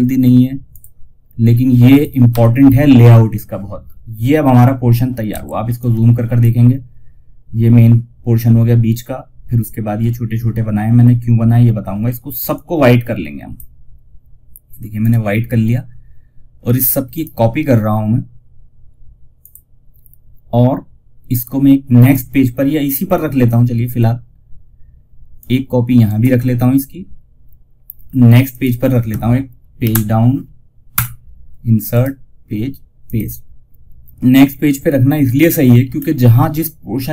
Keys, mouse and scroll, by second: 0.0 click, 0.5 scroll down 1, 1.2 click, 1.6 F4, 4.6 F2, 5.1-8.0 drag, 10.5-10.9 scroll down 1, 11.8-14.3 drag, 16.4 right click, 18.7 click, 24.7 click, 25.3 ctrl+right click, 27.8 click, 29.1 Page_Down, 30.2 Return, 31.2 right click, 32.3 click, 35.2 scroll up 1.